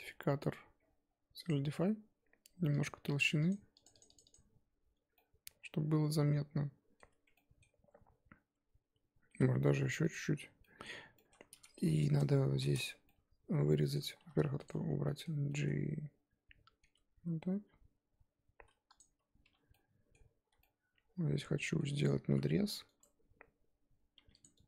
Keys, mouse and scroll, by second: 1.6-5.1 drag, 5.1-7.1 middle drag, 7.1 Tab, 7.3-9.3 middle drag, 9.3 s, 10.3 Tab, 10.6 middle click, 10.8 scroll down 1, 10.9 Tab, 11.1 middle click, 11.4 Tab, 12.5 shift+h, 12.7 Tab, 12.8 scroll up 1, 13.0-14.2 middle drag, 14.2 2, 14.6 click, 15.0-16.8 middle drag, 16.8 g, 19.4 1, 19.7-22.3 middle drag, 22.3 ctrl+r, 24.1 2, 24.4 click.